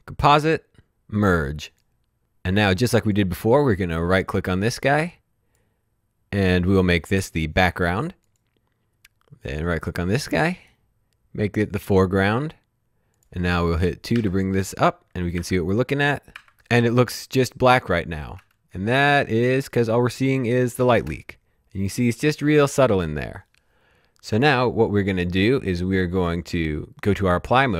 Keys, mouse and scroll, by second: 1.7 click, 2.7 click, 4.2 right click, 8.3 click, 9.4 right click, 11.8 click, 14.2 2, 16.4 typing, 18.3 space, 21.0 space.